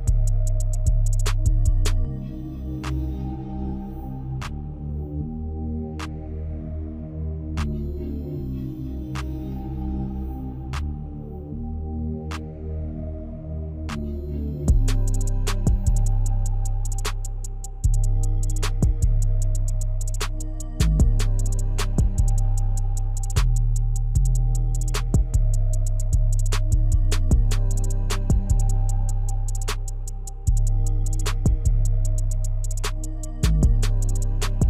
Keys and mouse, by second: 0.6 click, 3.3 click, 4.7 click, 6.0 click, 11.4 click, 12.0 click, 13.6 click, 21.9 click, 26.9 click.